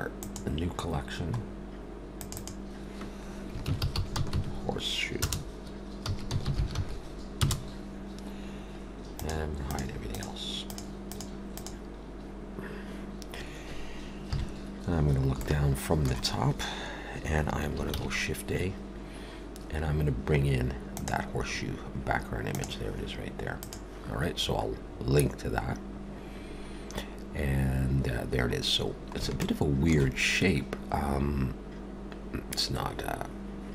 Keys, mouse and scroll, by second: 1.4-2.0 scroll down 3, 2.1 click, 2.3 click, 9.2 click, 9.7 click, 10.1 click, 10.7 click, 11.0 click, 11.6 click, 14.3 KP_7, 15.4 shift+middle click, 17.9 shift+a, 22.4 click, 24.7 scroll, 24.8-25.7 scroll down 4, 29.4 shift+middle click.